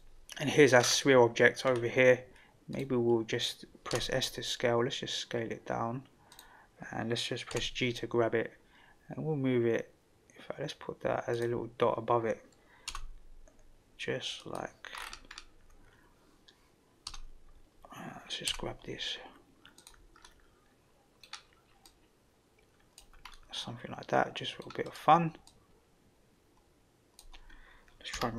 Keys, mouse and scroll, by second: 0.7 scroll down 2, 1.6 scroll up 2, 2.7 click, 3.9 s, 7.5 g, 12.9 s, 14.9 scroll up 2, 17.1 d, 18.4 g, 20.2-21.2 middle drag, 20.2 scroll down 1, 21.8-23.0 drag, 23.3-24.6 middle drag, 25.4-27.2 drag.